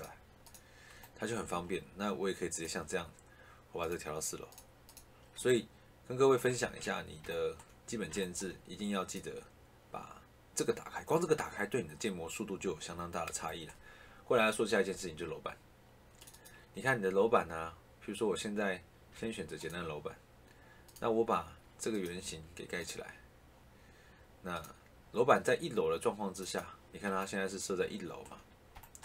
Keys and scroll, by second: 6.5 ctrl+z.